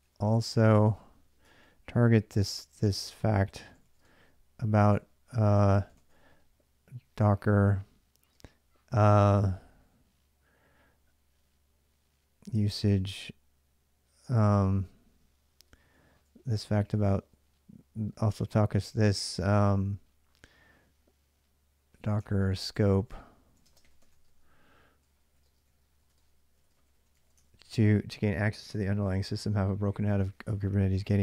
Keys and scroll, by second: 0.0-6.5 typing, 1.3 ctrl+[, 8.2 Tab, 12.0-13.2 typing, 15.7-18.7 typing, 21.5-27.9 typing.